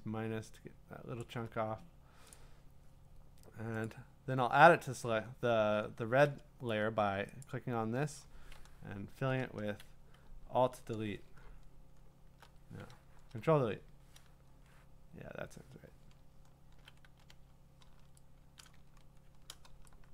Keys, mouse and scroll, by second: 1.2 alt+click, 2.3 click, 3.8 click, 4.9-5.9 scroll down 14, 5.9 scroll, 7.4 click, 9.1 BackSpace, 9.8 Escape, 10.4 alt+BackSpace, 11.5-12.2 scroll, 13.0 ctrl+BackSpace, 16.2-16.8 scroll, 17.0 ctrl+d, 18.7 click, 18.9-19.4 scroll.